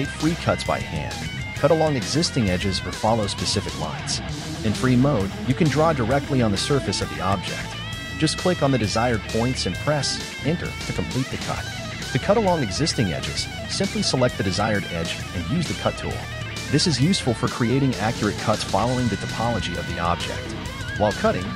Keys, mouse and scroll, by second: 4.3 ctrl+z, 5.5 k, 13.2 k, 17.8 k, 20.1 click, 20.4 shift+right click, 20.7 shift+right click, 21.0 shift+right click, 21.1 shift+right click, 21.2 shift+right click.